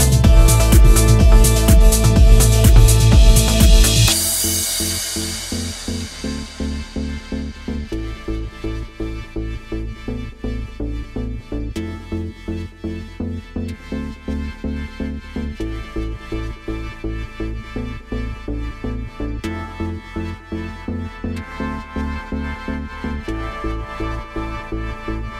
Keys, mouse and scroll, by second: 0.1-0.9 scroll down 3, 0.9 Tab, 2.5 click, 3.4 a, 4.0 middle click, 5.4 ctrl+j, 6.4 middle click, 7.9 ctrl+j, 9.5 middle click, 10.6-11.2 scroll up 1, 11.6 shift+middle click, 12.1-12.4 scroll up 3, 12.6 middle click, 13.7-14.1 scroll down 1, 14.1 middle click, 15.7-16.1 scroll down 1, 16.1 middle click, 16.6 scroll up 1, 17.2 shift+middle click, 17.6-18.4 scroll up 1, 18.4-19.1 scroll down 1, 19.6 click, 20.3-20.7 scroll up 3, 21.0 shift+middle click, 21.8-22.4 scroll up 1, 22.4 middle click, 24.8-25.3 scroll up 3.